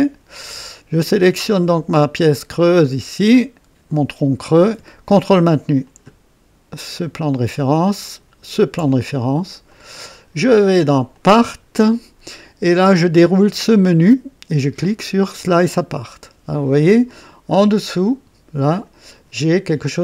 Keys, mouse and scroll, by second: 0.4-2.0 drag, 2.6 click, 4.0 click, 5.9 ctrl+click, 8.1 ctrl+click, 9.7 click, 11.1 click, 13.7 click, 15.6 click, 18.0-19.0 drag.